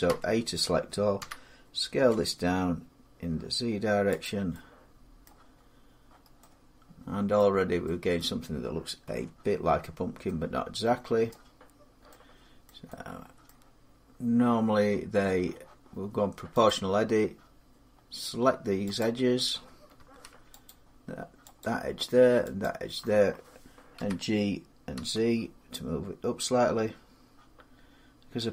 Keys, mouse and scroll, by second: 1.0 s, 1.9 z, 4.0 click, 5.0 middle click, 5.4 scroll up 3, 7.2 middle click, 7.3 middle click, 7.4 middle click, 8.0 middle click, 8.8 Tab, 9.5 Tab, 11.1 middle click, 12.5 middle click, 13.3 middle click, 16.5 click, 18.8 click, 20.5 click, 21.5 click, 22.4 click, 23.8 g, 24.7 z.